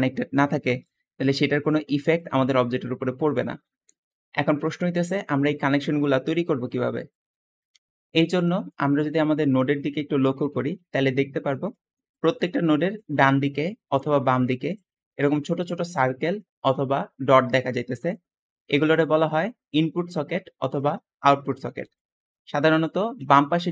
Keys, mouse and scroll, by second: 4.3 Escape, 4.3 Escape, 4.9-5.5 scroll down 2, 5.5 scroll down 1, 6.3 middle click, 7.2 middle click, 8.0-9.8 scroll up 4, 8.6 middle click, 9.0 middle click, 10.0-10.8 scroll down 2, 10.4 middle click, 15.3 click, 16.6-17.6 drag, 20.7 click, 21.3 click, 21.9 Escape.